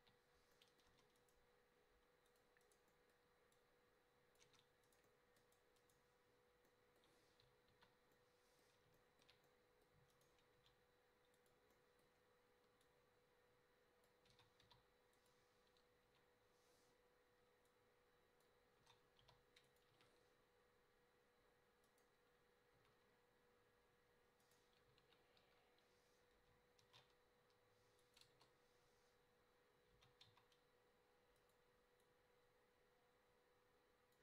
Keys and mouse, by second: 0.0 KP_7, 0.9 Tab, 2.3 click, 3.0 middle click, 4.5 Tab, 5.0 right click, 7.7 KP_5, 10.6 g, 14.3 s, 16.1 KP_0, 18.8 s, 19.9 a, 23.1 a, 24.4 middle click, 25.0 KP_7, 25.4 KP_5, 26.8 shift+d, 28.4 KP_0, 30.0 g.